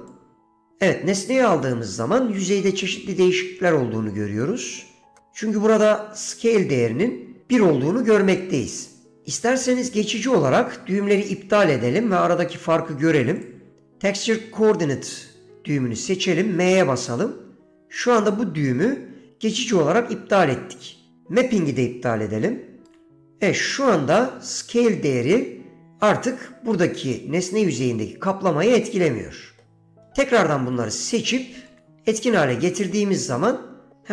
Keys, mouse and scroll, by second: 0.2-0.8 drag, 4.5 middle click, 13.5 click, 16.9 m, 23.1 m, 24.6 middle click, 29.0 middle click, 31.2 click, 31.2 m, 31.8 m, 33.6 middle click.